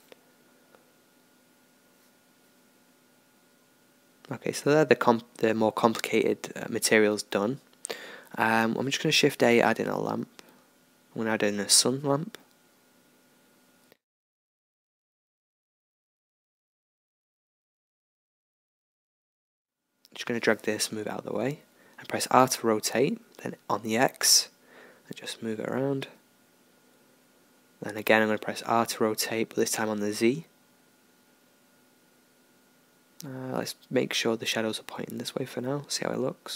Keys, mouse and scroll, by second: 0.0 Escape, 1.6-6.5 middle drag, 6.5 shift+a, 12.0-15.5 middle drag, 15.5-21.4 drag, 16.0-18.7 middle drag, 20.2-22.6 middle drag, 21.4 r, 24.9-27.9 drag, 27.9-29.3 middle drag, 29.3 r.